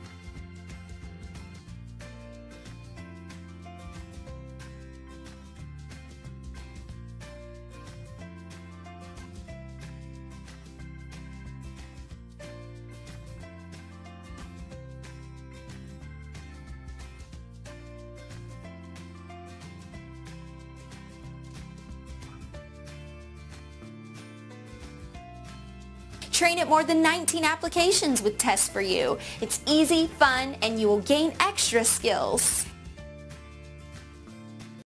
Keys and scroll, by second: 13.0 Home, 19.4 Home, 20.3 Delete.